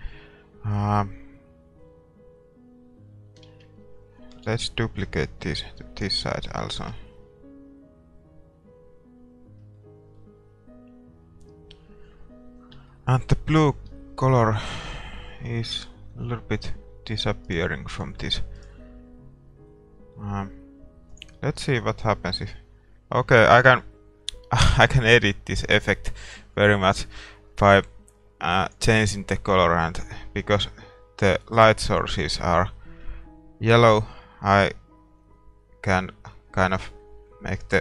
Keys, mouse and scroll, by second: 3.5 shift+z, 4.5 shift+d, 5.0-6.9 drag, 6.4-8.1 middle drag, 6.9 shift+z, 8.2 middle click, 9.7-11.4 middle drag, 11.4-12.9 scroll up 1, 12.9-16.0 middle drag, 16.0-16.8 scroll up 1, 17.7-20.3 right drag, 20.1-21.9 middle drag, 21.9-23.0 drag, 26.2-30.8 drag.